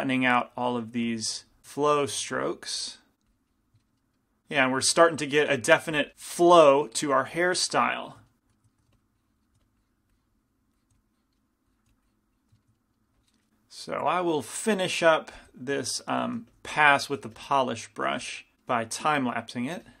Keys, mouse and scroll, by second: 0.0 f, 1.6 f, 1.8 click, 2.3 middle click, 2.3 right click, 2.4 f, 4.7-7.8 middle drag, 8.1-9.2 middle drag, 8.9 f, 9.2-13.2 drag, 9.6 f, 11.0 f, 12.0 f, 13.2 middle click, 13.9-16.1 middle drag, 16.6 f, 17.5 f, 18.2 f, 19.3-20.0 drag.